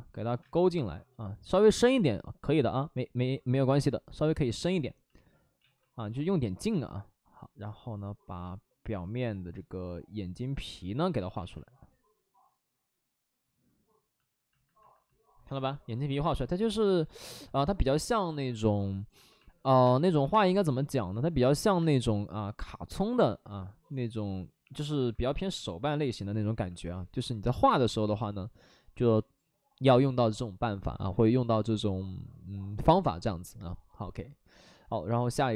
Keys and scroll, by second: 0.3 space, 1.5 ctrl+z, 1.6 space, 4.5 space, 5.5 ctrl+z, 6.2 ctrl+z, 11.0 ctrl+z, 11.1 ctrl+z, 19.7-20.5 typing, 21.6 ctrl+z, 21.7 space.